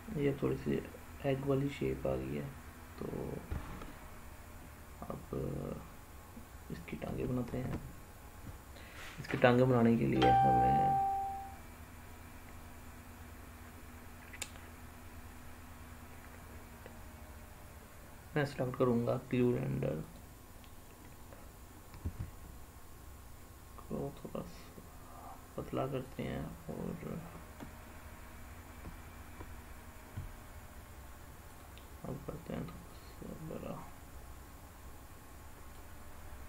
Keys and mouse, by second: 7.3 shift+a, 21.9 s, 25.9 click, 31.4 click, 32.8-35.6 drag.